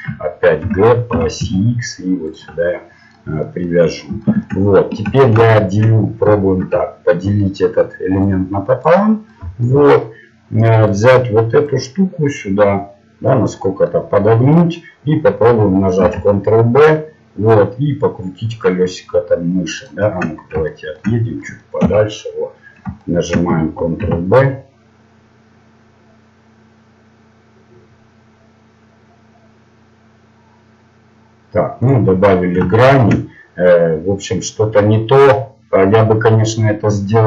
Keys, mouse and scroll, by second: 0.6 g, 2.6-3.8 middle drag, 6.6 ctrl+r, 9.4 middle click, 11.0-12.8 right drag, 11.6-13.6 drag, 13.6 middle click, 16.0 ctrl+b, 20.1-23.0 middle drag, 21.8 KP_1, 24.0 ctrl+b, 32.2 middle click.